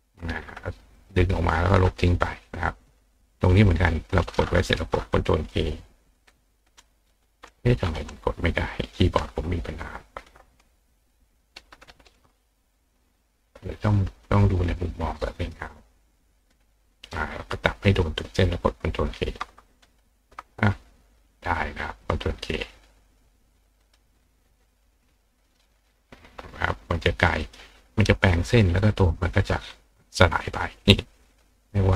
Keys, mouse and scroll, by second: 0.9 click, 3.5 click, 13.7 click, 15.4 click, 16.4 click, 17.3 click, 23.8 click, 25.4 click, 27.4 click, 28.4 click, 30.4 click, 31.3 click.